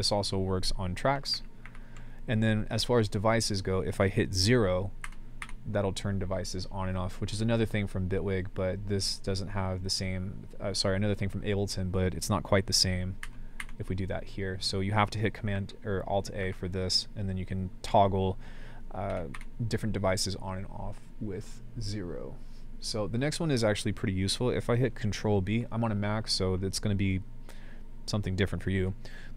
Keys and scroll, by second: 1.3 alt+a, 1.6 alt+a, 5.0-5.4 typing, 13.2-13.6 typing, 15.5 alt+a, 17.8 alt+a, 19.1 typing.